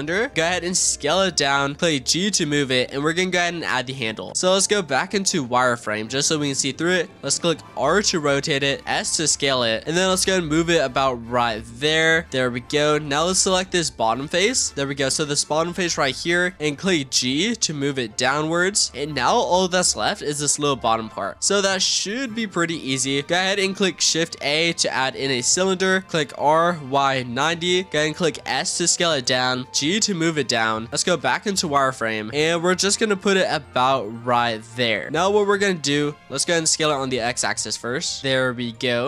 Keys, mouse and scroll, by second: 0.0-0.3 scroll down 9, 0.3 s, 1.8 g, 2.8-3.7 scroll up 14, 3.7-4.3 shift+middle drag, 4.3-4.7 scroll down 1, 4.7 z, 6.9 r, 8.8 s, 9.8 g, 9.9 g, 11.3 s, 12.6 g, 13.3 middle click, 14.2 click, 14.7 z, 16.4 click, 16.8 shift+middle click, 17.4 g, 18.9-19.3 scroll down 6, 19.3 click, 19.7 click, 19.9-21.3 middle drag, 21.3 click, 22.0 click, 24.2 shift+a, 25.4-26.3 scroll down 5, 26.3 r, 28.1 s, 29.7 g, 30.6 scroll up 1, 30.9 z, 31.4 s, 32.3 g, 34.1 s, 35.0 shift+middle click, 35.6 z, 36.1-36.8 middle drag, 36.8 s.